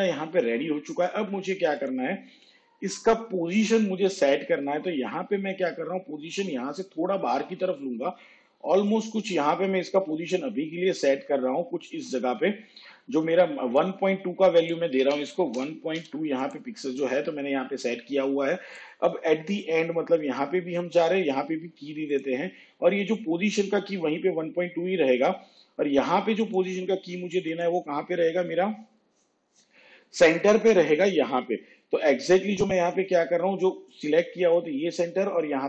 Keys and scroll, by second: 4.2 p, 15.2 1, 16.1 2.